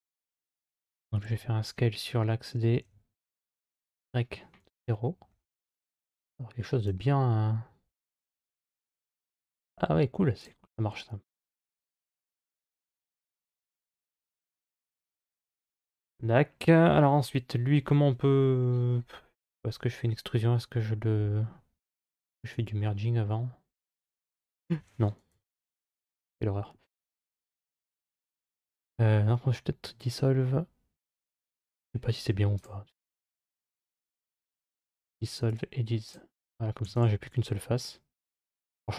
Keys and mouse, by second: 1.1 s, 5.9 click, 7.9 s, 11.2 3, 11.5 right click, 13.7-15.6 middle drag, 22.3 m, 25.1 ctrl+z, 31.0 2, 31.5 right click, 34.0 x, 36.7 3, 36.8-38.9 right drag.